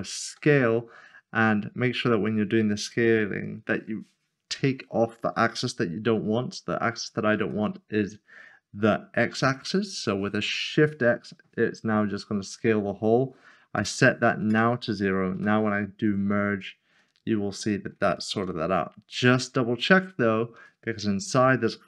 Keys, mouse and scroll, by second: 0.3 s, 8.4 x, 13.7 x, 14.5 Return, 15.4 m, 16.0 click, 17.1 shift+middle click, 19.1 middle click, 20.2 scroll up 1.